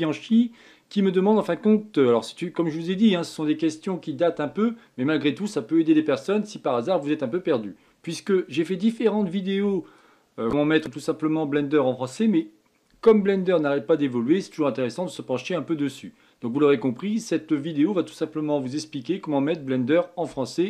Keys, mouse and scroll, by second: 10.0-13.0 drag.